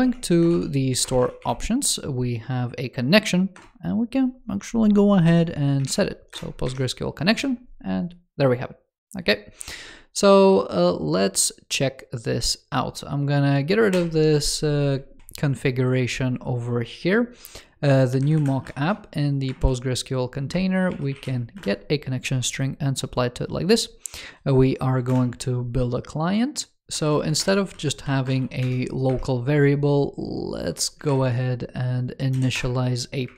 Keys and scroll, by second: 15.2 super+s, 25.0 super+Return, 26.8 alt+Left, 27.3 alt+BackSpace, 31.0 super+Return.